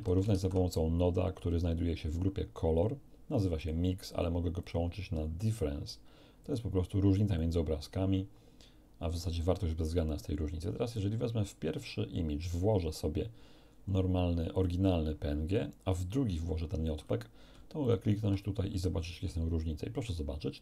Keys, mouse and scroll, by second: 0.3 shift+a, 3.5 click, 4.1 click, 4.6 click, 6.4 click, 7.3-10.0 drag, 10.9-13.1 drag, 14.5 click, 15.9-17.0 drag, 17.8 ctrl+shift+click.